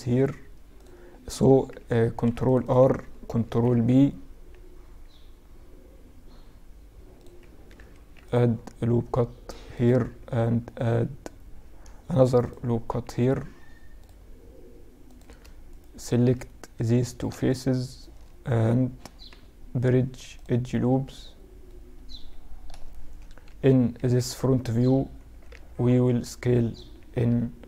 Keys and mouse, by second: 1.1 ctrl+r, 2.5 ctrl+b, 6.9 ctrl+r, 9.7 ctrl+t, 11.2 ctrl+r, 14.2 click, 14.8 middle click, 15.6 click, 15.6 right click, 15.6 middle click, 15.8 click, 15.8 right click, 15.8 middle click, 15.9 click, 15.9 right click, 16.7 middle click, 17.0-18.4 right drag, 18.4 middle click, 18.4 w, 20.0-21.9 middle drag, 22.6 KP_3, 23.1 KP_1, 23.5 z, 24.4 s.